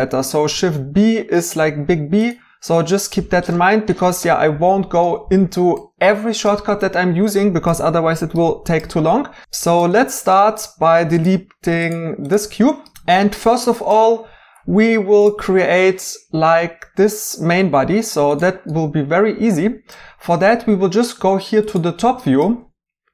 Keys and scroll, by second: 0.5 b, 2.8 Escape, 9.4 x, 12.5 x.